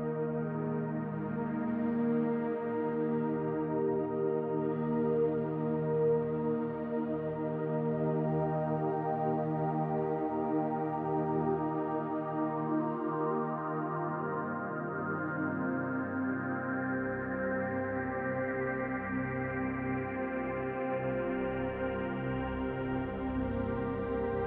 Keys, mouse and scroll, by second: 0.1 click, 1.3-2.1 scroll up 1, 2.1 scroll up 1, 2.2 click, 3.4 s, 5.2 click, 6.4 middle click, 7.1 click, 7.8 middle click, 8.8 click, 10.1 middle click, 10.6 scroll up 3, 11.1 shift+middle click, 12.4 ctrl+middle click, 13.2 middle click, 14.9 r, 17.3 click, 18.4 middle click, 19.2-19.7 scroll down 1, 19.7 middle click, 21.1 shift+d, 21.8 click, 23.6 r.